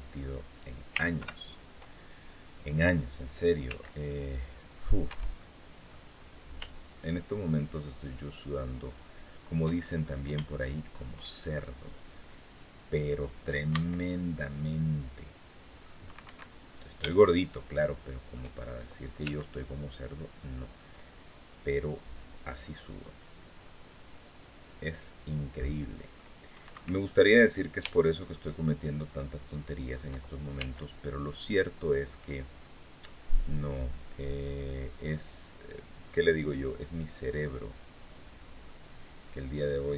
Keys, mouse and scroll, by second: 0.9 ctrl+KP_7, 3.4 c, 3.8 middle click, 4.0 click, 4.8 Escape, 5.1 click, 5.9-6.3 scroll up 2, 6.6 shift+right click, 7.8 shift+right click, 8.6 shift+right click, 9.5-10.0 shift+scroll up 3, 10.2 shift+middle click, 12.2 click, 13.4 c, 14.1-15.7 middle drag, 16.0 Escape, 16.4-16.7 scroll down 2, 16.9-18.2 shift+middle drag, 19.0 c, 19.8-26.1 middle drag, 26.5 Escape, 27.6 shift+right click, 28.1 shift+right click, 28.6-29.8 shift+middle drag, 30.3 c, 31.9-38.6 middle drag, 39.4 click.